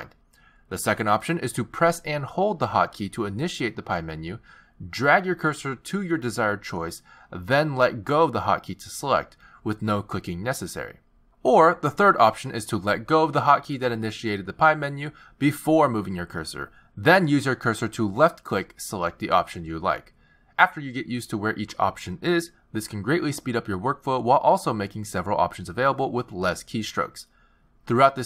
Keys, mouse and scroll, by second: 0.1 z, 13.2 z, 14.7 z.